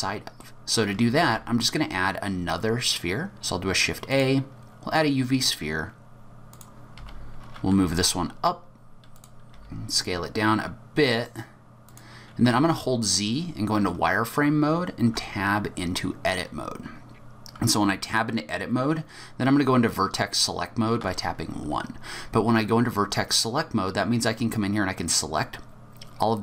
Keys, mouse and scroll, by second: 1.0 middle click, 1.2 shift+a, 6.5 click, 7.0 g, 9.5 s, 12.5 z, 15.1 Tab, 21.0 1, 23.4 click.